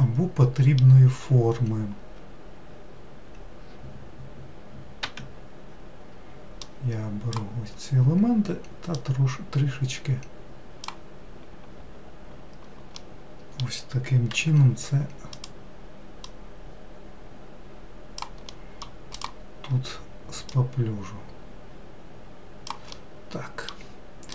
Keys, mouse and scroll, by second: 6.6 click, 9.0 click, 13.0-14.4 middle drag, 14.4 3, 15.4 click, 16.2 click, 18.5 middle click, 19.2 click, 20.5 click, 23.0-24.3 middle drag.